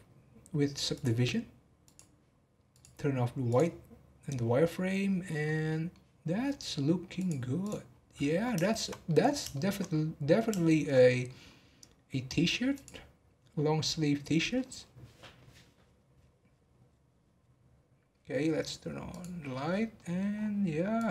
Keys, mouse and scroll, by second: 1.8 click, 2.7-5.4 drag, 5.4-6.2 middle drag, 6.2 scroll down 1, 7.1 click, 7.6 click, 7.8-8.6 scroll down 2, 8.6-11.4 shift+middle drag, 11.4-13.3 scroll up 1, 13.3 click, 19.1 click, 19.6 scroll down 1, 19.9-20.3 middle drag, 20.3 scroll up 2, 20.9 click.